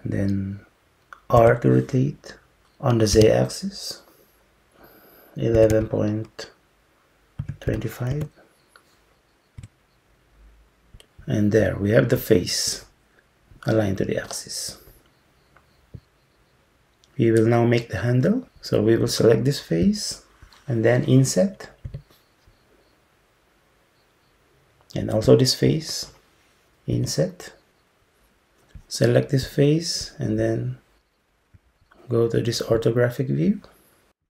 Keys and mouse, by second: 1.4 r, 9.9 Return, 21.9 i, 27.0 i, 32.8-33.9 drag.